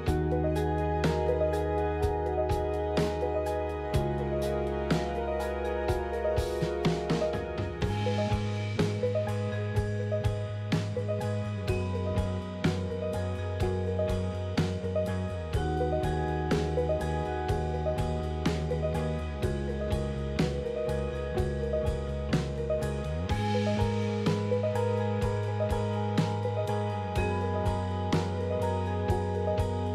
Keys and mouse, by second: 0.1 middle click, 0.5 Tab, 1.1 click, 2.1 click, 2.8 click, 5.6 3, 5.8 click, 6.3 x, 8.8 alt+click, 9.7 alt+click, 12.9 Tab, 13.3 middle click, 14.4-20.7 ctrl+z, 17.1 middle click, 21.1 middle click, 22.5 click, 23.4 Tab, 23.6 middle click, 24.8 KP_3, 25.9 middle click, 27.8 Tab.